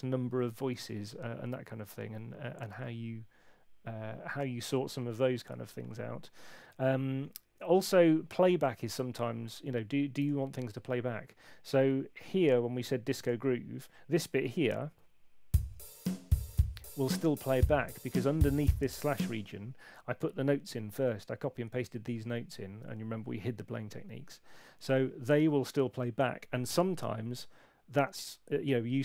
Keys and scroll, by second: 14.4 p, 19.0 space.